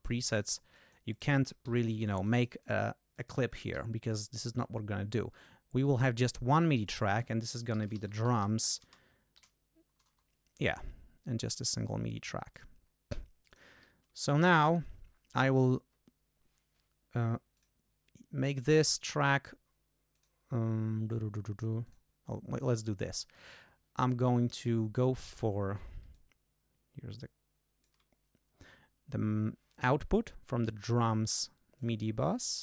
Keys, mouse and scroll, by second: 0.3 click, 0.7 click, 1.7 d, 1.8-2.9 drag, 3.1 click, 3.7 g, 4.1 right click, 5.9 click, 6.8 click, 7.5-10.0 typing, 11.3-11.9 scroll down 1, 12.5 click, 13.5 click, 14.2 ctrl+Up, 17.5 click, 18.4 click, 20.1 click, 21.8 click, 24.0 click, 24.6 click, 26.1 click, 26.5 click, 26.7 click, 26.9 click, 27.5 click, 31.7 click.